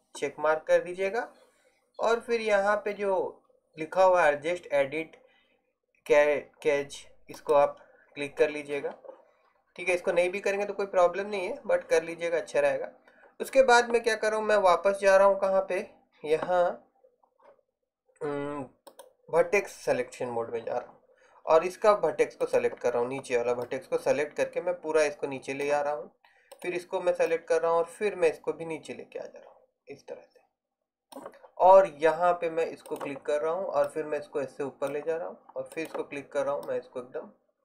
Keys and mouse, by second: 8.9-10.0 drag, 22.5-23.7 right drag, 23.7 middle click, 27.4 middle click, 33.0 right click, 35.8 right click.